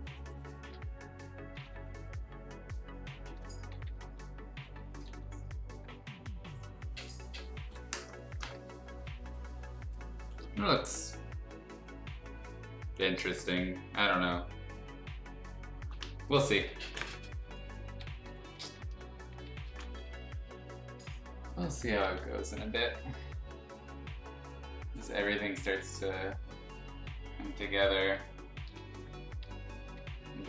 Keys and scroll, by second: 0.7 x, 1.5 ctrl+z, 3.2 ctrl+z, 3.7 [, 3.9 [, 4.0 [, 5.0 ctrl+z, 9.7 space, 18.2 ], 19.3 ], 20.0 x, 21.0 x, 22.0 ctrl+z, 22.9 [, 23.1 [, 25.6 ctrl+z, 27.5 ctrl+z, 28.1 space, 28.7 b, 30.0 ].